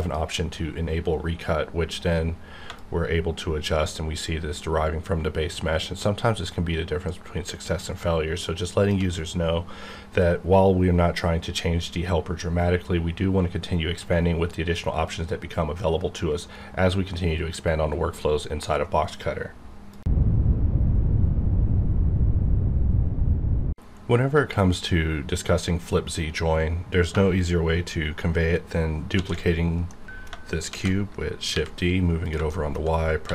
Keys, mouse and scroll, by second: 0.0 click, 2.8-11.5 shift+drag, 30.6 shift+d, 31.5 y, 32.2 click, 32.5 shift+middle click, 33.2 s.